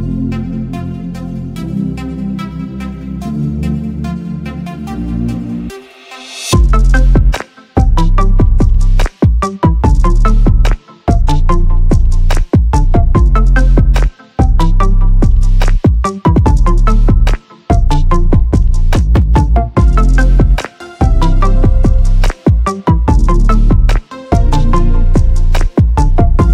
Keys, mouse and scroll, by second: 0.9 click, 1.7 click, 2.5 click, 3.3 Tab, 4.0-4.9 drag, 6.0-7.3 drag, 7.8 f, 9.4 f, 9.7 f, 10.1-11.4 drag, 11.8-13.7 drag, 14.1-15.8 drag, 16.1-17.4 drag, 17.7 click, 18.8 click, 19.9 right click, 20.4 click, 20.8-21.2 middle drag, 21.7 click, 22.1 middle click, 23.7 middle click, 24.3-25.5 drag, 26.1 click.